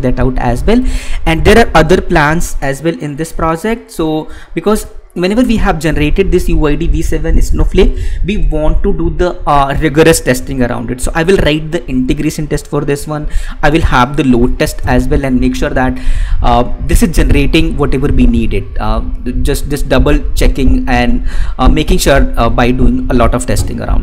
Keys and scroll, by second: 4.7 alt+Tab.